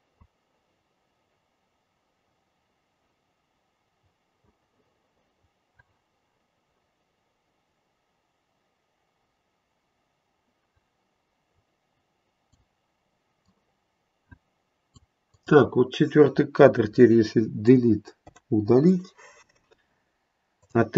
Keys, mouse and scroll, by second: 13.4 click, 15.2 click, 18.2 Delete, 20.5 click.